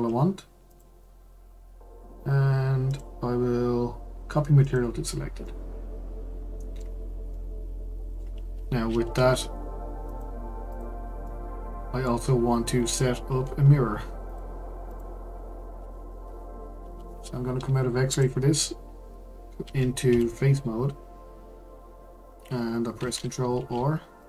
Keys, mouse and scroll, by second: 0.7 click, 2.9-5.4 drag, 5.4-9.2 middle drag, 9.2 Tab, 10.0 click, 10.4 Tab, 10.7 click, 11.2-13.3 middle drag, 13.3 ctrl+r, 14.3 click, 14.9 click, 15.8 Tab, 18.1-19.6 drag, 19.6 2, 20.1 3, 23.5 ctrl+r.